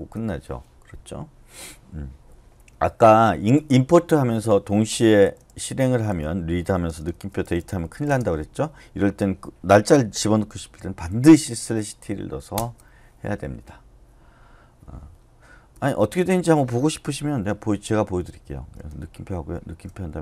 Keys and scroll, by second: 0.1 Return, 5.2-8.1 typing, 10.8-11.6 typing, 12.6 Return, 15.5-16.2 typing, 18.6-20.2 typing.